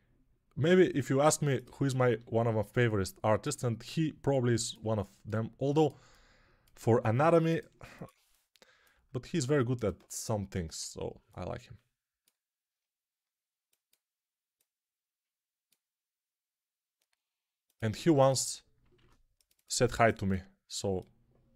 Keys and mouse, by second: 1.5 click, 2.0 g, 5.0-10.9 drag, 6.6 g, 8.8 g, 10.9-21.0 ctrl+middle drag, 18.8 ctrl+r, 21.0-21.5 drag.